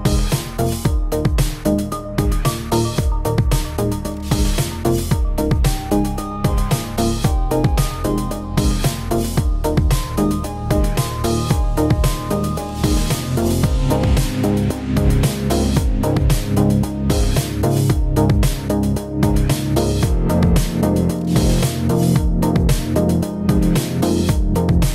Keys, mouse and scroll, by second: 0.2 middle click, 0.3 g, 0.6 shift+middle click, 0.7 middle click, 1.0 click, 1.0 click, 1.2 g, 1.5 click, 1.8 click, 1.8 g, 2.0 scroll down 2, 2.2 Tab, 2.7 click, 2.8 click, 2.9 shift+middle click, 3.1 shift+middle click, 3.2 middle click, 3.2 shift+middle click, 3.4 click, 3.5 Tab, 3.7 middle click, 3.9 middle click, 4.0 scroll up 4, 4.2 shift+middle click, 4.3 scroll down 1, 4.3 shift+middle click, 4.5 Tab, 4.5 click, 5.7 click, 5.8 click, 6.2 click, 6.3 click, 6.7 click, 7.5 click, 7.5 middle click, 7.7 shift+middle click, 7.8 middle click, 8.4 click, 8.9 Tab, 9.1 click, 10.0 click, 10.2 click, 10.4 click, 10.7 click, 10.9 click, 11.2 click, 11.4 click, 12.1 click, 12.4 click, 12.8 click, 13.2 click, 13.3 click, 13.5 shift+click, 13.6 middle click, 13.7 Tab, 13.9 click, 13.9-16.5 typing, 14.3 click, 14.6 click, 14.9 click, 15.1 click, 15.5 click, 15.6 click, 15.7 click, 16.1 click, 16.5 click, 16.7 scroll down 3, 16.8 middle click, 17.1 shift+middle click, 17.4 Tab, 17.5 click, 17.6 click, 17.8 shift+middle click, 18.1 click, 18.1 Tab, 18.4 shift+middle click, 18.5 scroll up 2, 18.6 Tab, 18.7 middle click, 18.8 scroll down 3, 19.5 middle click, 19.7 shift+middle click, 19.9 click, 20.1-23.2 typing, 20.5 click, 21.0 shift+middle click, 21.3 click, 21.7 click, 21.9 middle click, 22.1 shift+middle click, 22.1 scroll up 3, 22.2 click, 22.6 click, 22.8 scroll down 4, 22.9 middle click, 23.0 shift+middle click, 23.1 click, 23.2 middle click, 23.3 middle click, 23.4 shift+middle click, 23.4 middle click, 23.5 shift+middle click, 23.5 shift+middle click, 23.6 middle click, 23.9 shift+middle click, 23.9 click, 24.2 click, 24.4 click, 24.6 click, 24.7 shift+middle click, 24.8 click.